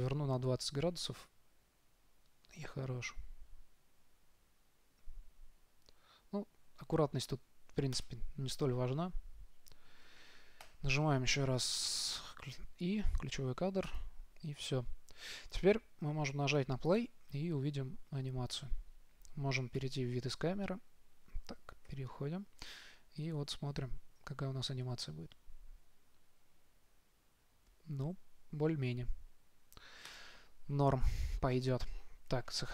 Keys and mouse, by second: 10.9 i, 17.2 click, 20.1 KP_0, 22.3 KP_0, 30.4-32.3 drag.